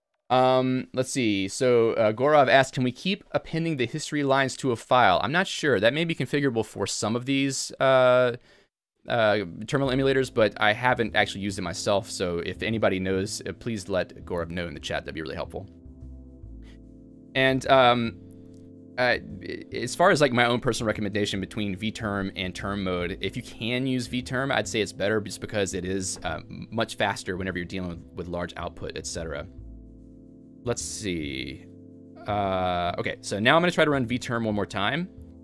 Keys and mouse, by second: 18.4-19.7 typing, 31.0-34.2 typing, 34.8 alt+x, 34.8 Return.